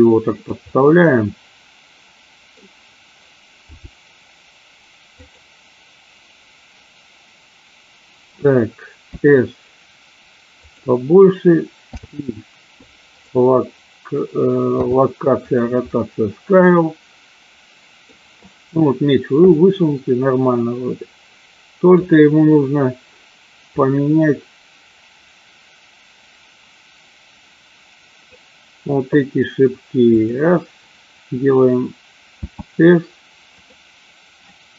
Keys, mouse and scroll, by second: 0.5 click, 0.7-2.9 middle drag, 2.7 scroll down 1, 3.5 g, 5.3 click, 9.1 s, 11.7 i, 16.0-18.2 middle drag, 22.0 click, 23.9-28.3 drag, 30.1-30.5 drag, 32.3 s.